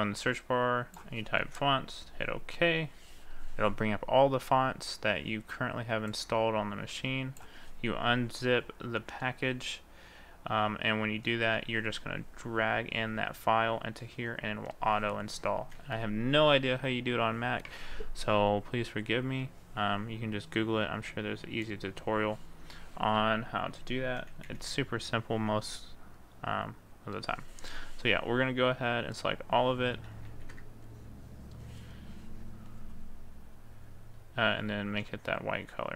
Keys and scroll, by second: 24.5 ctrl+a.